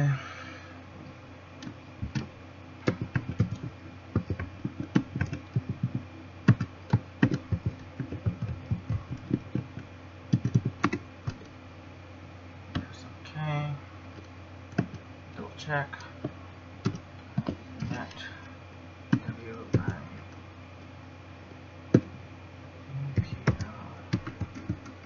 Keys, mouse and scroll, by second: 13.0 click.